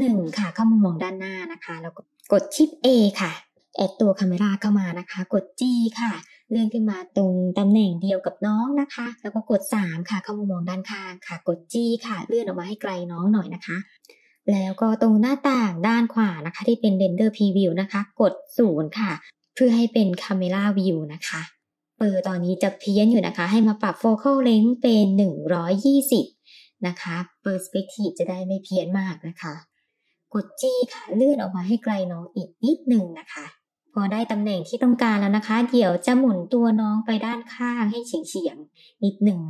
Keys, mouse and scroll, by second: 0.4-0.9 scroll up 3, 1.0-1.3 shift+middle drag, 1.7 shift+a, 5.3 g, 9.2 KP_3, 10.8 g, 17.4 KP_0, 18.4-19.9 scroll up 5, 23.5-26.2 drag, 28.5-29.1 shift+middle drag, 29.7 g, 34.9 click, 38.2-38.6 shift+middle drag, 38.9-39.4 drag.